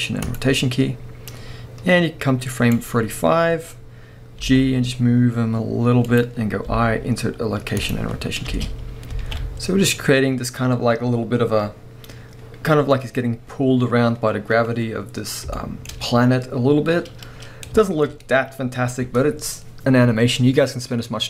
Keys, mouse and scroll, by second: 1.4-6.2 drag, 3.8-4.4 scroll down 1, 4.4 g, 8.5 space, 9.4 a, 9.5-9.9 scroll down 2, 14.5 scroll down 1, 15.6-17.5 shift+middle drag, 18.3 scroll up 1.